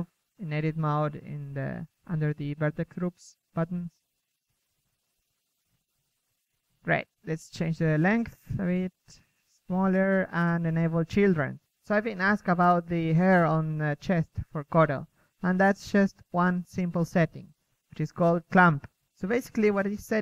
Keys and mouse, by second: 1.4 Tab, 1.8-2.2 middle drag, 2.2 KP_1, 2.3 click, 2.6 click, 2.8-4.1 drag, 4.2 click, 4.5-5.0 drag, 5.2-5.8 middle drag, 5.8 KP_3, 6.6 KP_1, 6.9 KP_3, 7.2 ctrl+Tab, 7.7 KP_1, 10.2 middle click, 10.7 KP_3, 11.8 a, 14.0 a, 14.4 a, 15.4-16.0 middle drag, 17.3 KP_1, 17.6 z, 17.9 a, 19.2-20.0 drag, 20.0 click.